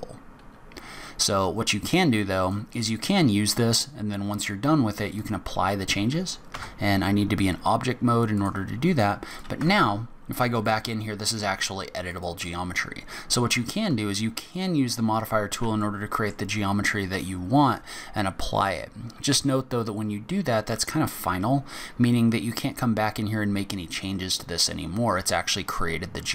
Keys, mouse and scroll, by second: 2.6 click, 3.4 scroll up 1, 3.9 scroll down 1, 5.4 click, 6.7 Tab, 8.5 click, 9.5 click, 9.8 Tab, 10.2-10.5 scroll up 2, 10.7 click, 12.3 alt+click, 13.9 middle click, 15.3 alt+click, 16.0 middle click, 24.7 scroll down 2, 25.4 scroll up 1.